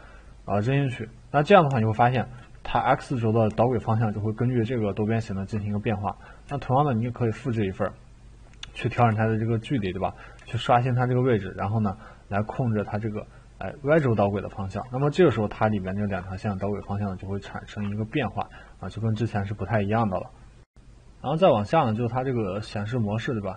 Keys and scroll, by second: 9.0 e, 10.5 ctrl+z.